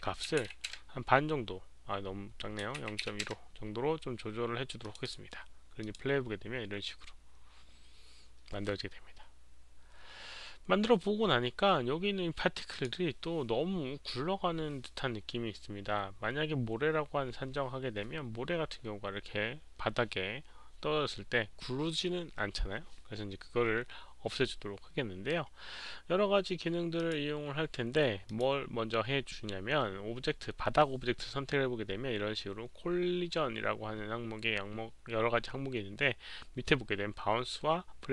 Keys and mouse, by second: 0.2 alt+middle click, 0.2 click, 0.3 KP_Decimal, 4.8 click, 4.9 Return, 4.9 KP_Decimal, 4.9 KP_1, 4.9 KP_5, 5.0 click, 5.8 click, 11.1 Return, 11.1 click, 11.1 KP_5, 11.1 KP_1, 11.1 KP_Decimal, 12.7 click, 13.6 Return, 13.6 click, 13.6 KP_5, 13.6 KP_1, 26.9 click, 28.2 click.